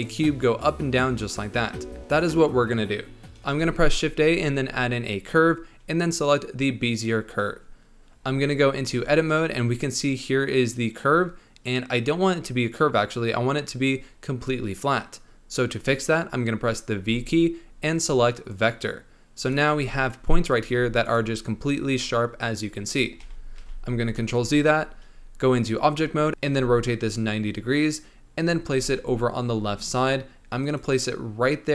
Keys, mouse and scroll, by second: 3.5 shift+a, 8.2-8.9 scroll up 4, 8.9 Tab, 17.0 v, 19.4 click, 19.7 g, 20.7 e, 22.7-23.2 scroll down 4, 23.2 ctrl+z, 23.6 ctrl+z, 24.2 Tab, 25.0-25.9 scroll up 1, 25.9 r, 26.4 r, 28.6 g.